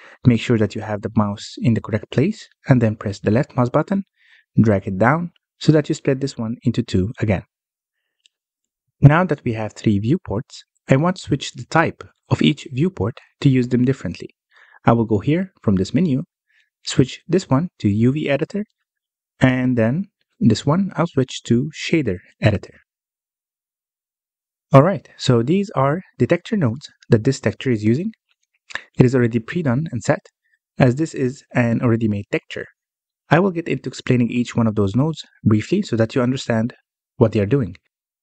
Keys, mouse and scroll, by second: 3.4-6.4 drag, 17.0-24.1 drag, 24.1-24.4 scroll down 3, 24.4-25.0 middle drag, 25.0 n, 25.6-26.8 scroll down 2, 26.8-27.2 scroll down 1, 27.2-28.1 scroll up 5, 28.1-29.9 middle drag, 29.9-30.7 scroll up 1, 30.7-33.5 middle drag, 33.5-34.4 scroll down 4, 34.4-38.2 middle drag.